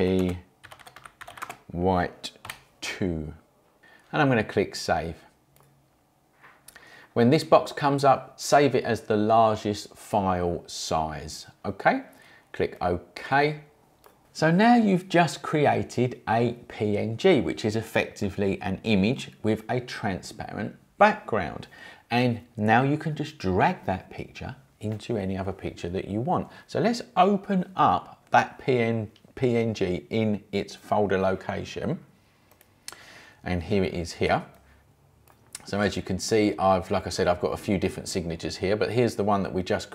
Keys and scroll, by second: 0.0-2.4 typing.